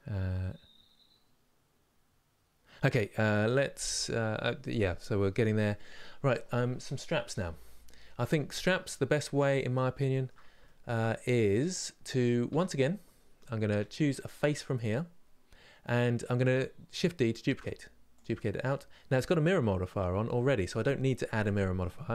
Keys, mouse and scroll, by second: 8.5 scroll up 2, 9.2-11.3 middle drag, 11.3 click, 12.2 Tab, 15.7-17.2 middle drag, 17.2 shift+d, 18.1-22.1 middle drag.